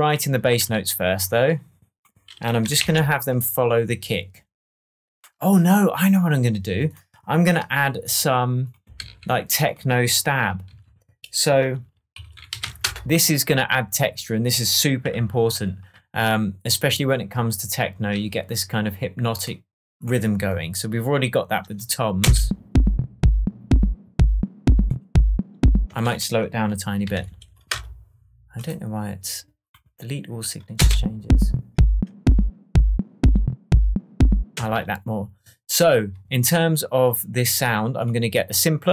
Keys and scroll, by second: 2.8 shift+super+m, 9.0 shift+super+t, 10.6 super+r, 11.4 shift+super+r, 11.9-13.0 typing, 15.1 super+s, 22.2 space, 25.8-27.6 typing, 27.6 Return, 30.7 space, 34.5 space.